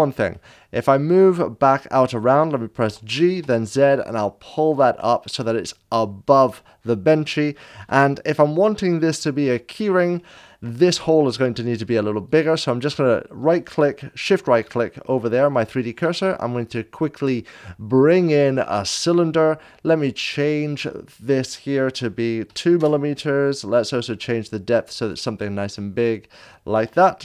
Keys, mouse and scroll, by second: 0.0 click, 0.3-2.8 middle drag, 2.8 click, 2.8 g, 3.3 z, 4.5 click, 5.0-7.8 middle drag, 7.8 KP_7, 9.1 shift+middle click, 12.3 shift+right click, 16.0 shift+a, 18.5 click, 18.5 7, 22.4 2, 22.7 Return, 22.7 shift+a, 24.0 click, 24.0 2, 25.7-27.2 middle drag.